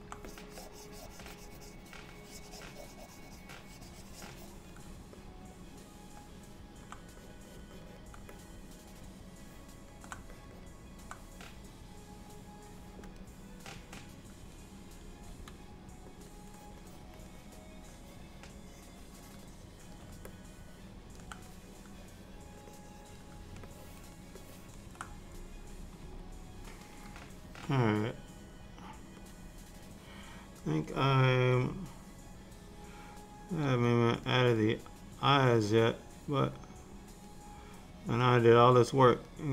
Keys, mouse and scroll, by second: 0.3 click, 5.2 middle click, 7.3 click, 7.6 click, 7.8 click, 8.0 click, 8.4 middle click, 10.4 click, 10.6 click, 13.2 click, 15.4 f, 16.6 click, 16.9 click, 17.2 click, 17.4 click, 17.9 click, 18.4 click, 18.7 click, 19.1 click, 19.6 click, 20.4 middle click, 21.6 click, 22.9 click, 23.7 ctrl+middle click, 24.5 ctrl+middle click, 26.1 KP_1, 29.4 click, 33.7 f, 34.7 click, 36.7 click, 37.9 click, 39.0 click.